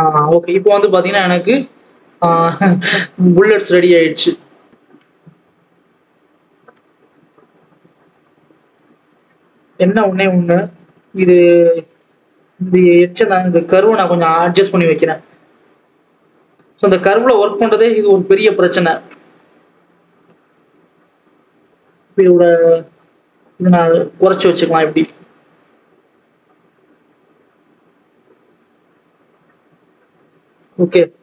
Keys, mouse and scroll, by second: 0.6 click, 2.7-3.2 scroll up 1, 4.7 click, 6.5 click, 7.0-8.1 scroll up 1, 8.1-11.0 drag, 12.0 click, 12.1 Tab, 12.9 click, 13.5 g, 17.2 g, 20.4 Tab, 21.6 click, 23.1-25.0 drag, 26.4 click, 26.9-27.4 scroll up 1, 27.4-27.9 scroll down 1, 27.9 alt+a, 29.0 click, 31.0-31.2 scroll down 4.